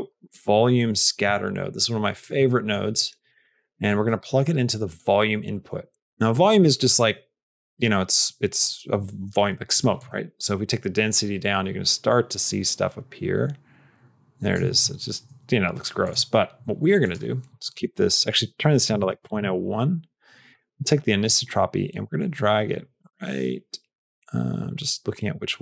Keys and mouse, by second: 2.4 middle click, 2.9 click, 3.9 click, 4.2 middle click, 4.8-6.4 drag, 9.8-14.4 shift+drag, 17.0-20.0 drag, 20.5-25.6 drag.